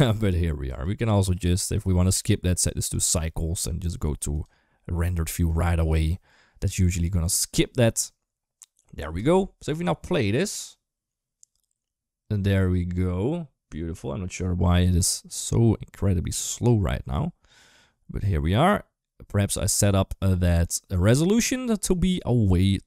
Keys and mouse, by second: 0.5 click, 1.9-2.9 drag, 4.1 click, 5.0 middle click, 9.5 space.